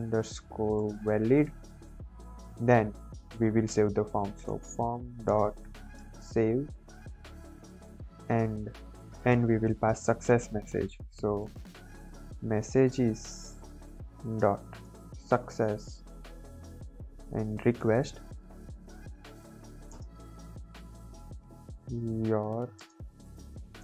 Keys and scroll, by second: 0.2 shift+Down, 0.7 Return, 1.0-2.2 typing, 2.4 Return, 3.9-7.4 typing, 8.0 Right, 9.2 Return, 9.6 BackSpace, 11.1-12.3 typing, 12.5 Down, 13.0 Up, 13.5 Return, 14.3 ., 14.8 s, 15.3 Tab, 16.2-23.8 typing, 16.7 Left, 18.8 Down, 19.2 Return.